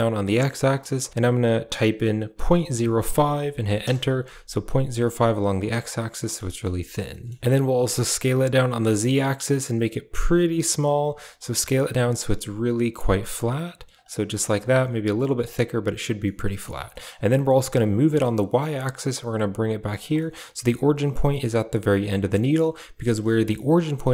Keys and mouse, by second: 4.9 middle click, 6.1 middle click, 6.3 shift+middle click, 6.7 middle click, 7.0 shift+middle click, 7.7 s, 11.3 s, 14.2 middle click, 14.4 s, 16.1 middle click, 16.8 middle click, 17.6 g, 20.1 shift+middle click, 21.1 g, 22.2 middle click, 23.2 Tab, 23.9 click.